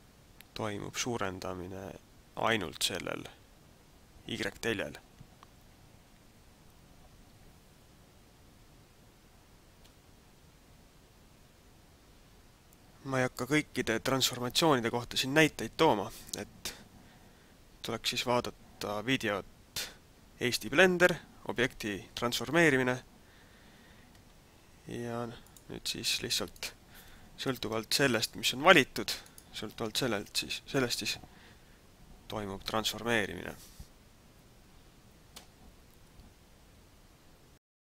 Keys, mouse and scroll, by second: 25.5 click, 26.7 right click, 28.2 shift+right click, 29.5 shift+right click, 31.2 r.